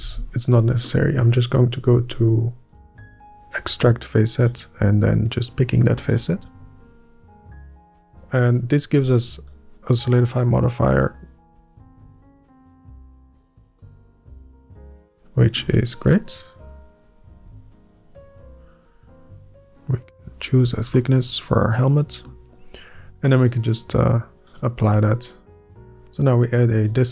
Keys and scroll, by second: 0.1 ctrl+z, 1.7 Up, 1.9-6.0 scroll up 1.